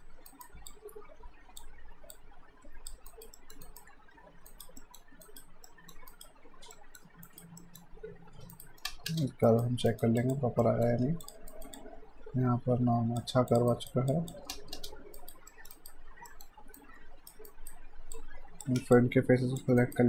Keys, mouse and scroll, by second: 0.3 alt+right click, 0.7 click, 3.1 alt+right click, 3.3 alt+middle click, 3.6 right click, 4.8 middle click, 5.3 right click, 5.7 middle click, 6.1 right click, 6.7 middle click, 7.3 right click, 7.6 middle click, 8.1 q, 8.6 right click, 8.9 space, 9.5 alt+right click, 10.2 alt+click, 10.6 alt+middle click, 11.1 q, 11.3 click, 11.5 alt+right click, 11.7 alt+click, 13.7 alt+right click, 14.1 click, 14.5 space, 15.2 right click, 15.5 middle click, 15.7 right click, 16.3 alt+middle click, 16.8 right click, 17.5 alt+right click, 18.2 click, 19.0 ctrl+click, 19.8 alt+right click.